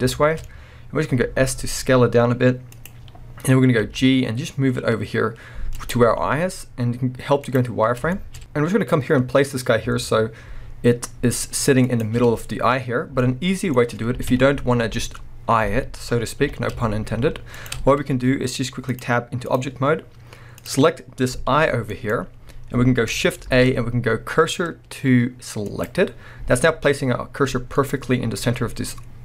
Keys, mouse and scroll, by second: 0.2-2.8 shift+middle drag, 0.4 scroll up 1, 1.3 s, 2.8 click, 3.8 g, 5.9 click, 6.0 z, 8.1 shift+scroll up 1, 8.1-12.0 shift+middle drag, 8.4 g, 12.0 shift+click, 12.2 scroll down 1, 13.2-17.7 middle drag, 14.3 KP_1, 14.8-16.2 scroll up 2, 16.2 scroll up 1, 16.4 g, 17.7 shift+click, 18.9-20.7 drag, 20.9-21.5 scroll down 2, 21.5 g, 22.1 right click, 23.4 shift+s, 26.4 scroll up 2, 27.7 scroll down 2, 27.7-29.2 middle drag, 29.1-29.2 scroll down 2.